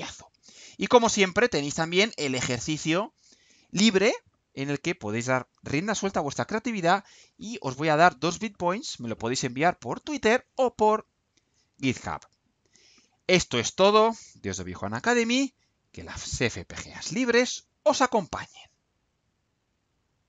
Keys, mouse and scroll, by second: 2.7 click, 17.4 click, 18.9 click.